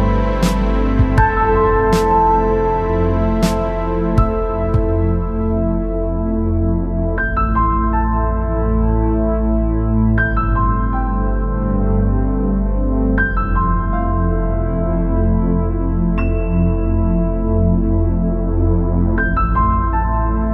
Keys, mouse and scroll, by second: 1.2-2.3 drag, 3.4-4.4 drag, 5.8 KP_1, 6.9 shift+z, 7.4 b, 9.4-19.6 drag, 19.9 middle click.